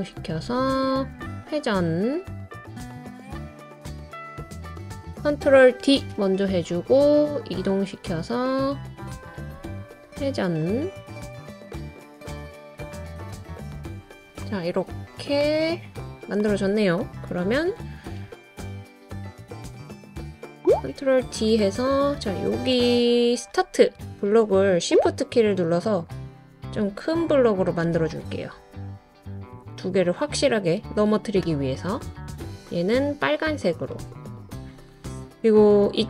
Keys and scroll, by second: 2.7 super+d, 2.9 super+d, 3.4 super+d, 4.9 super+z, 5.4 super+d, 8.7 super+d, 9.3 super+d, 11.1 super+d, 11.3 super+d, 11.6 super+d, 14.0 super+d, 15.0 super+z, 17.1 super+d, 21.0 super+d.